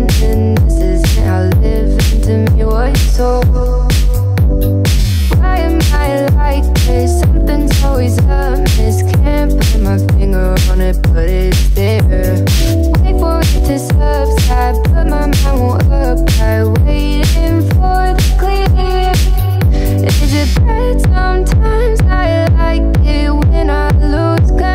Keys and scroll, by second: 1.9 Left, 6.5 Right, 7.8 Right, 8.6 Left, 11.1 Right, 22.2 5.